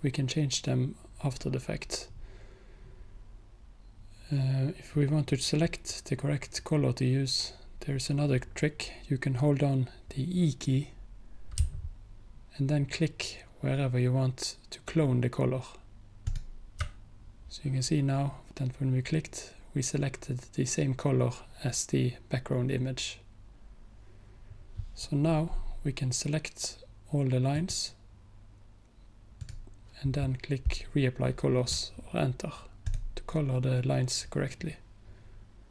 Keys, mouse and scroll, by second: 11.7-12.8 typing, 14.0 typing, 27.6 click, 32.9 click.